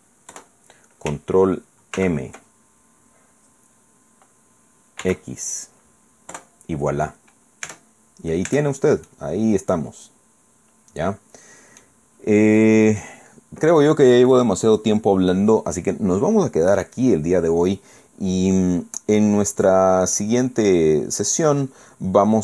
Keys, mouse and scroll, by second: 0.3 KP_Enter, 2.0 ctrl+m, 5.0 x, 6.3 KP_Enter, 7.7 Tab, 8.0 scroll down 2, 8.5 Tab, 8.8 scroll down 2, 9.1-12.0 drag, 12.0-12.4 scroll up 2, 12.4 middle click, 12.6 click, 15.4-15.8 scroll down 2.